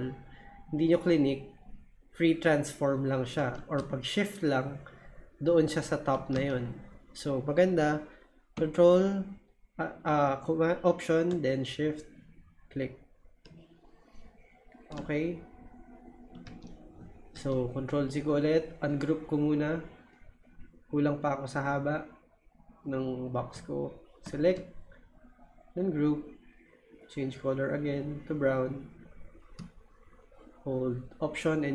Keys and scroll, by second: 3.4 super+z, 6.3 super+z, 16.4 super+z, 17.3 super+z.